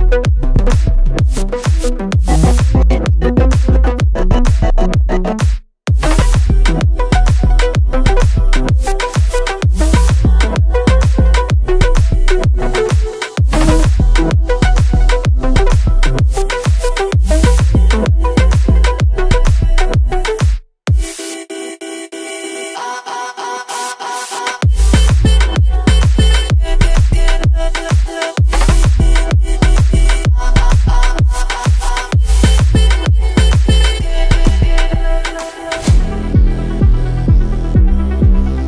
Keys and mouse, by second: 10.7-11.0 drag, 15.2 shift+a, 24.9 shift+a, 32.6 x.